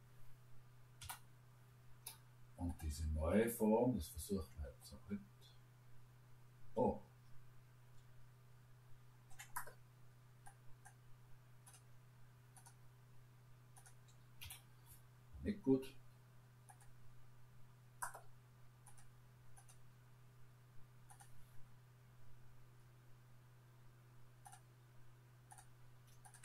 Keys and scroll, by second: 1.0 Delete, 14.4 Delete.